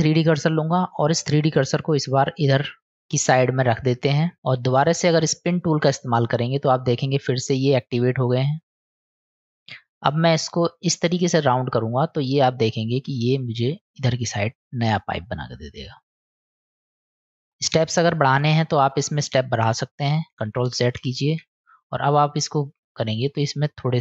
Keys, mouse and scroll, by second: 2.6 click, 3.2-4.3 middle drag, 5.9-9.3 middle drag, 10.4-13.2 drag, 14.4-16.4 middle drag, 17.1 middle drag, 17.3 drag, 18.2 click, 18.5 click, 18.6 click, 19.3 click, 20.4 ctrl+z, 23.0-24.0 drag.